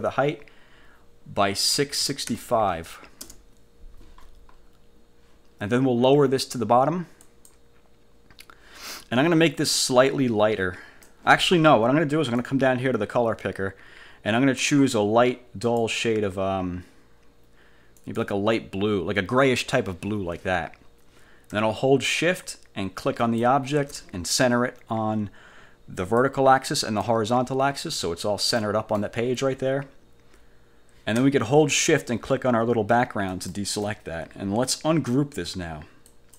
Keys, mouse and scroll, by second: 1.9 6, 2.4 5, 3.4 Return, 4.4 scroll up 2, 4.7-5.0 scroll down 2, 7.4 click, 10.2 click, 12.5-14.9 drag, 15.8 click, 18.1 click, 23.3 shift+click, 26.1 click, 26.9 click, 28.7 middle click, 33.4 shift+click, 36.2 click.